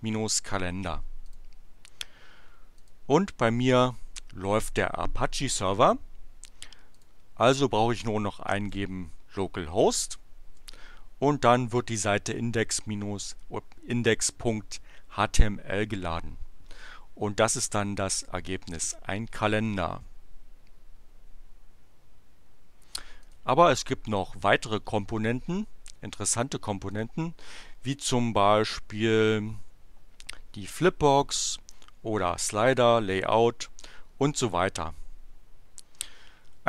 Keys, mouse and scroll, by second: 1.2 click, 2.8 click, 6.9 click, 8.2-9.0 typing, 10.6 Return, 23.2 click, 26.9 click.